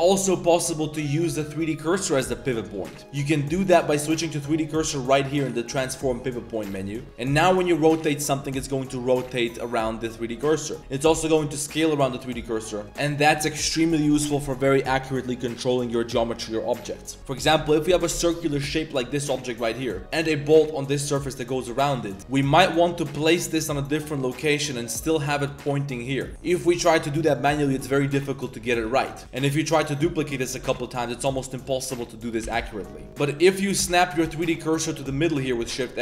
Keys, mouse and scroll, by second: 1.5 drag, 1.9 drag, 2.5 drag, 3.6-6.6 drag, 7.3 r, 11.0 s, 12.9 s, 18.3 drag, 19.1 click, 19.6 g, 22.2 shift+KP_7, 22.2 shift+middle drag, 22.7 g, 23.9 r, 26.3-31.9 typing, 26.8 shift+click, 32.4 ctrl+z, 32.6 ctrl+z, 32.7 ctrl+z, 32.8 ctrl+z, 33.1 drag, 33.4 Tab, 33.8 3, 33.9 alt+click, 34.2 shift+s, 34.9 Tab.